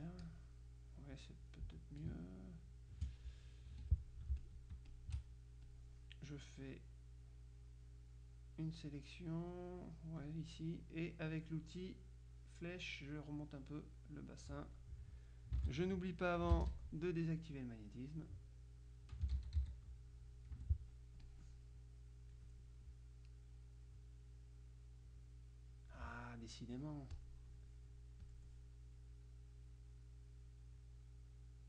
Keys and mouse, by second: 2.2 space, 3.8 F2, 4.0-5.6 drag, 5.8-10.8 drag, 15.7 ctrl+z, 18.3-19.8 drag, 19.4 ctrl+z, 20.3 ctrl+click, 20.6 F2, 21.3-22.9 drag, 23.6-26.7 drag, 26.2 right click, 27.2 click, 28.3 click, 30.1-31.6 drag.